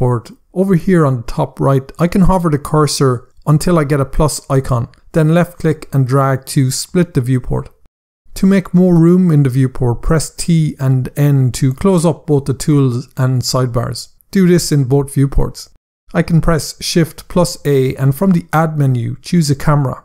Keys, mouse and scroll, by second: 5.1 click, 10.6-11.0 typing, 14.6-15.0 typing, 17.3 typing, 19.3 click.